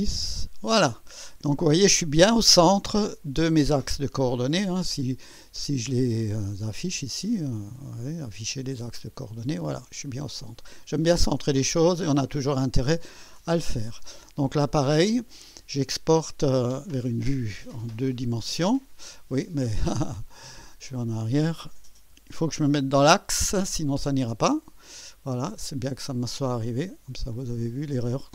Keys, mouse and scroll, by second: 0.0-0.3 typing, 1.6-1.9 scroll up 2, 3.5 scroll down 2, 4.4 click, 6.9 click, 9.0 click, 9.9-10.9 drag, 11.1 scroll down 2, 11.6-12.7 drag, 17.8 click, 20.8 click, 22.1 2, 27.6 click.